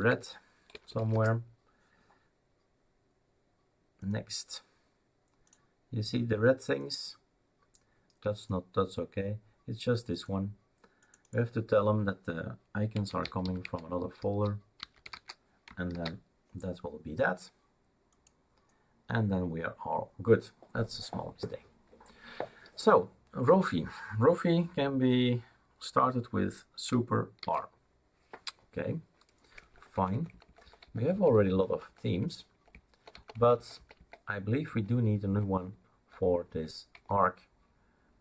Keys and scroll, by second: 0.0-0.9 typing, 1.1 Return, 12.7-15.6 typing, 15.9 ctrl+s, 27.4 super+r, 29.6 Down, 29.9 Down, 30.1 Down, 30.3 Down, 31.0 Down, 31.1 Down, 31.5-33.1 Down, 34.1 Down, 34.4 Down, 36.4 Down, 36.9 Down.